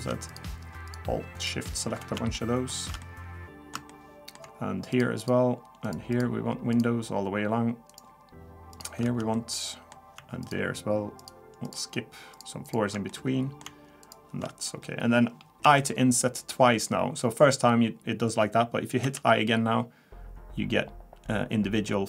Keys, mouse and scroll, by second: 0.3 alt+shift+click, 1.5 alt+shift+click, 2.3 alt+shift+middle click, 3.0 middle click, 3.9 shift+middle click, 4.9 alt+shift+click, 6.0 alt+shift+click, 6.9 alt+shift+click, 9.0 alt+shift+click, 9.3 shift+middle click, 10.4 alt+shift+click, 11.2 alt+shift+click, 11.7 alt+shift+click, 12.3 alt+shift+click, 13.1 alt+shift+click, 13.1 shift+middle click, 14.0 alt+shift+click, 14.8-15.3 scroll down 1, 15.6 i.